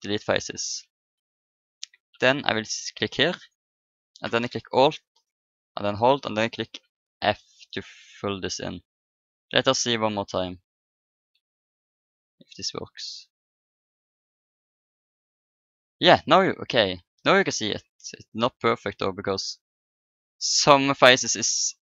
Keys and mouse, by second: 0.7-2.2 middle drag, 3.4-5.2 drag, 5.6-6.8 right drag, 6.8 f, 7.7 Tab, 8.5-10.1 middle drag, 11.1 Tab, 12.2-14.1 middle drag, 14.1-16.0 drag, 16.0 Tab, 16.7 a, 19.8 Tab.